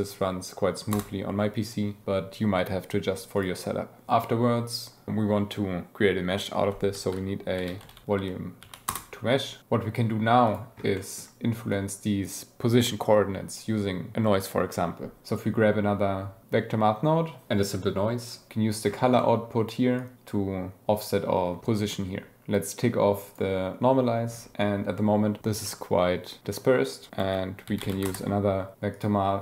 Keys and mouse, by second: 3.4 click, 6.9 shift+a, 9.7 g, 10.5 drag, 11.0 click, 11.7 click, 15.3 shift+a, 19.2 click, 20.0 click, 25.7-26.5 drag, 27.2 shift+a, 28.9-29.4 drag.